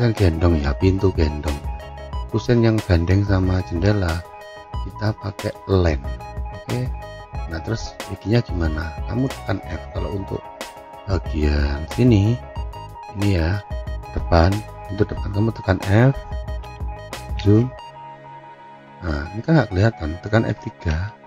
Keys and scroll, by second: 18.5 z, 21.0 F3.